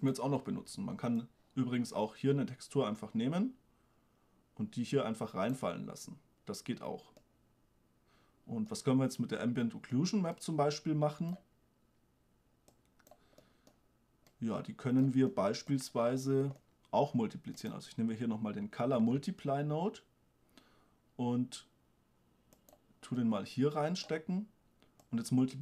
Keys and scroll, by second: 19.2 shift+d.